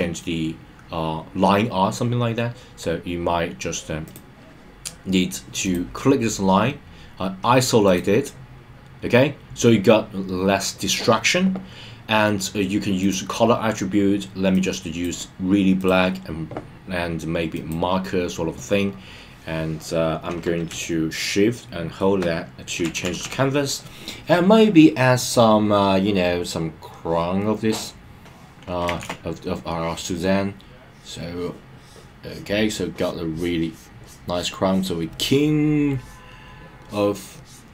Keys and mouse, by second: 4.0 click, 5.6 click, 7.8 click, 12.9 click, 14.5-15.1 drag, 15.8-17.7 drag, 21.2-22.9 shift+middle drag, 22.9 [, 23.6 [, 26.9 click, 29.0 super+z, 29.7 click, 30.7-35.1 drag, 35.8 click, 36.8 click, 37.3-37.7 drag.